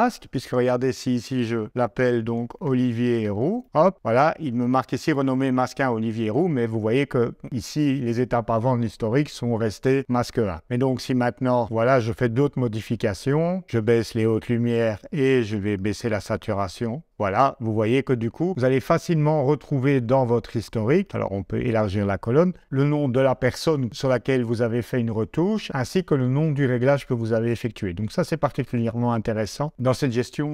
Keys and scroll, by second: 2.0-3.6 typing, 3.7 Return.